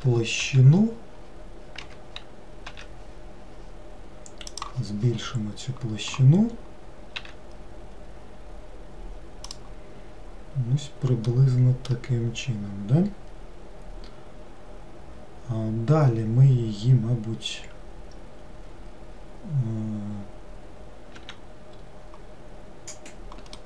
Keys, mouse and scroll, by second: 0.0 shift+a, 0.5 s, 2.8 s, 5.3-6.9 scroll down 3, 7.3 s, 11.4-12.2 middle drag, 12.2-15.5 scroll down 2.